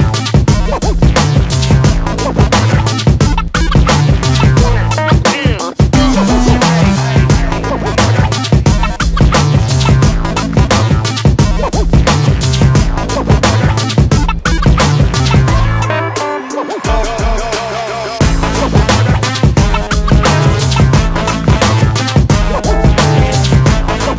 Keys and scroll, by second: 0.1 ctrl+shift+g, 2.6 space, 2.8 Escape, 3.2 space, 3.4 Escape, 3.7 Escape, 3.9 Escape, 15.9 space, 16.1 Escape, 16.5 space, 16.7 Escape, 17.0 space, 17.1 Escape.